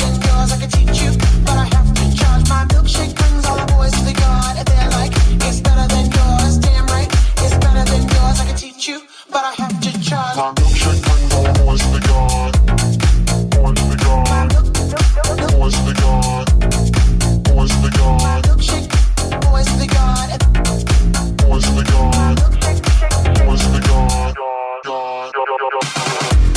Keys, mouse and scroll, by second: 0.1-2.8 middle drag, 9.6 ctrl+Tab, 15.9 ctrl+click, 16.3-21.9 shift+drag, 24.9 click.